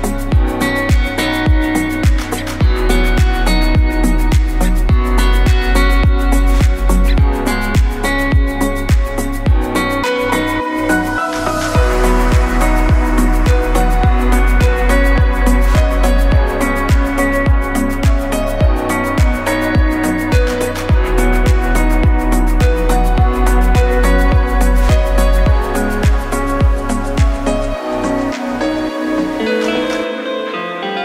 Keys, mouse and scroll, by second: 1.9 click, 2.9 s, 5.7 KP_1, 6.8 click, 8.6 i, 11.8 click, 12.0 KP_7, 13.1 KP_7, 15.0 s, 19.0 KP_1, 20.1 click, 24.4 click, 25.0 click, 28.4 click, 29.7 click.